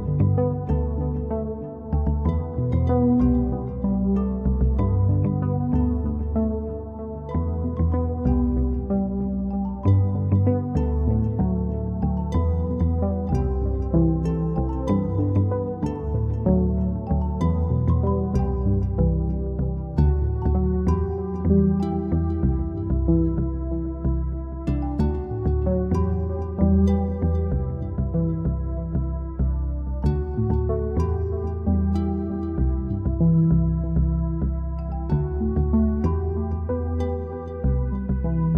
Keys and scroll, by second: 0.0 Return, 0.6 Home, 1.5 End, 2.8-3.7 typing, 21.9 Home, 24.1 End, 26.2 3, 26.4 Return, 28.2 Home, 30.9 End, 32.6 6, 32.9 Return, 33.9 Home, 37.0 End.